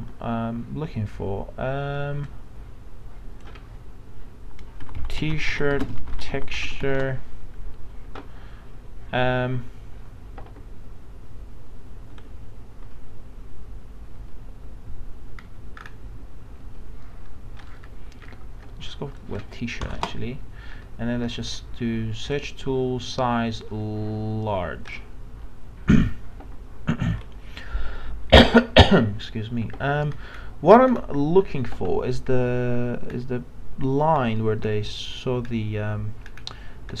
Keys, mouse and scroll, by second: 4.6-7.0 typing, 15.4 scroll down 1, 17.6 scroll up 1, 19.2 click, 19.8 BackSpace, 22.2-25.9 drag, 30.1 scroll down 1.